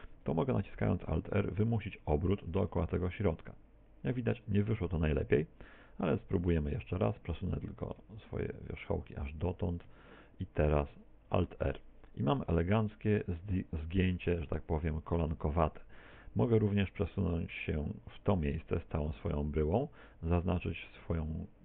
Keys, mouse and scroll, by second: 0.2 KP_1, 2.0 alt+r, 6.2 ctrl+z, 6.8 a, 7.0 a, 7.9 click, 9.6 a, 11.4 alt+r, 11.4 b, 14.7 a, 15.2 a, 16.2 g, 18.7 ctrl+click, 18.7 shift+middle click, 19.8 a, 20.8 b.